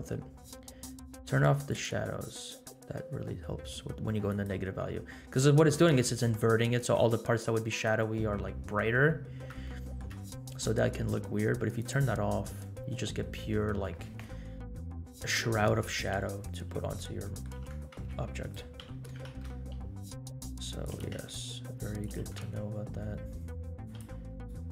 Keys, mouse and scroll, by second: 1.7 click, 4.3 click, 7.5 scroll up 2, 9.6-10.1 shift+middle drag, 11.8 click, 12.3-13.2 scroll down 6, 16.5-17.0 scroll down 2, 17.2 middle click, 17.6 g, 18.8 g, 21.2 g, 22.1 g, 24.0 r.